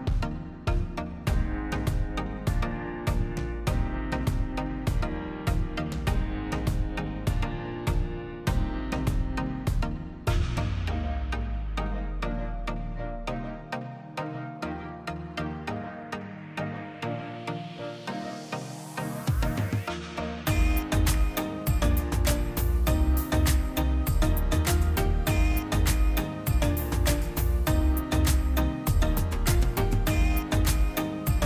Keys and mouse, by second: 2.2 click, 2.9 a, 4.4 u, 6.3 click, 6.9 click, 8.0 l, 14.6 click, 15.2 click, 16.9 l, 17.7 2, 18.4 3, 19.5 click, 20.6 l, 23.2 s, 27.6 g.